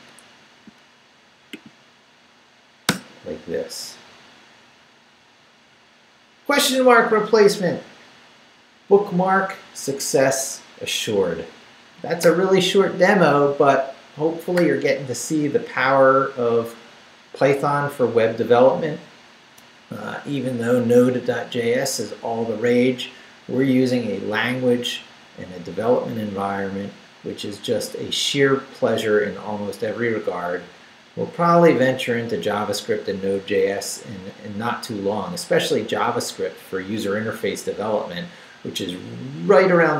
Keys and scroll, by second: 2.9 Return.